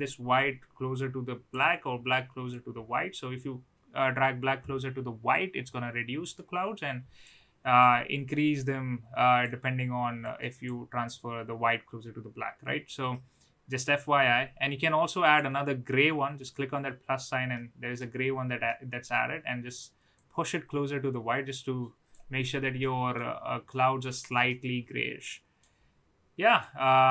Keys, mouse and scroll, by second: 2.5-7.2 drag, 7.8-9.4 drag, 10.1 click, 15.2 click, 17.5 middle click, 18.6-19.0 middle drag, 20.1-22.1 drag, 22.8-23.1 middle drag, 23.7-24.0 middle drag, 24.4-25.6 middle drag, 26.6-27.1 drag.